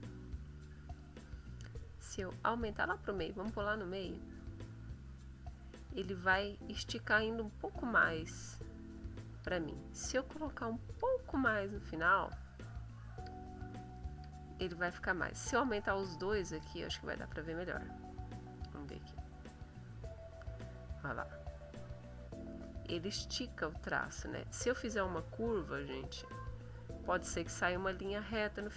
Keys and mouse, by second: 0.7 click, 2.5-3.6 drag, 4.3 click, 6.0 click, 7.6 click, 9.0 click, 10.3 click, 11.8 click, 13.0 click, 13.9 click, 15.6-16.8 drag, 19.0-20.1 drag, 21.0 click, 25.8 click, 26.4 click, 27.1 click, 27.8 click.